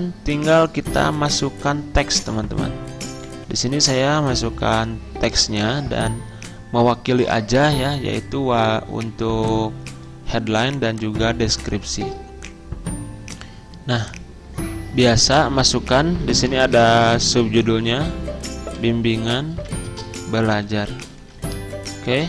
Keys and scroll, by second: 9.2 z, 16.1-17.6 typing, 18.6-21.6 typing.